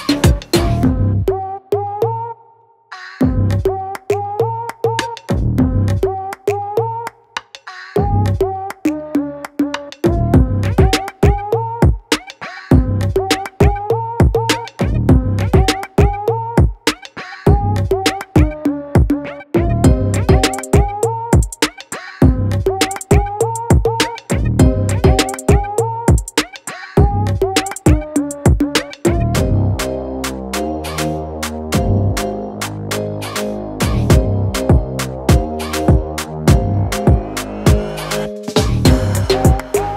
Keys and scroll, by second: 29.6-30.5 typing.